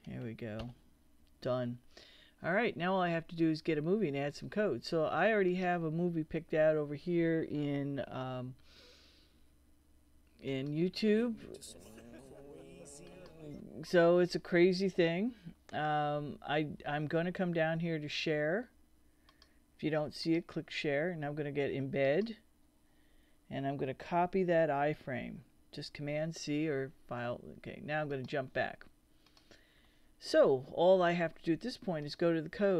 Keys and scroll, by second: 0.6 Return, 24.9 super+c.